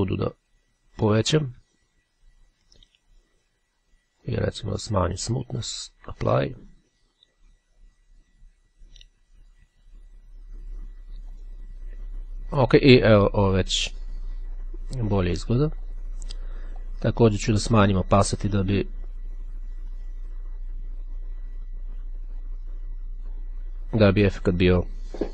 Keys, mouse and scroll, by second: 4.0-5.1 drag, 6.2 click, 11.2 click, 16.0 click, 16.8-24.0 drag.